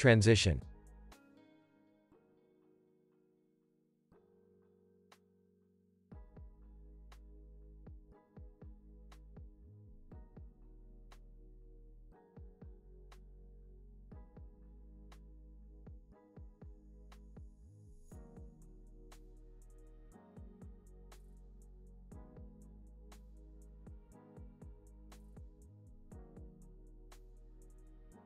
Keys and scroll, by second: 1.5 s, 3.5 x, 5.1 z, 11.0 Left, 11.2 -, 11.5 Return, 13.1 z, 13.6 x, 18.5 alt+[, 19.4 alt+z, 20.7 alt+], 21.4 alt+x, 22.2 alt+z, 22.8 alt+x, 27.1 alt+z, 27.7 alt+x.